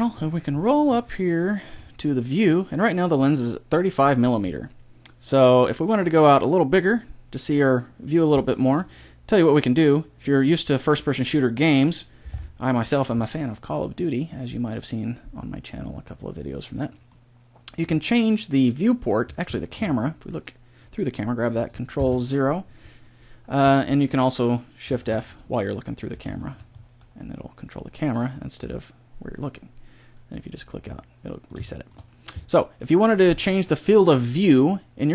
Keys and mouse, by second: 5.9-7.9 drag, 12.3 ctrl+Down, 14.0 click, 16.1 click, 16.1-20.3 middle drag, 21.9 ctrl+KP_0, 25.0 shift+f, 30.9 middle click.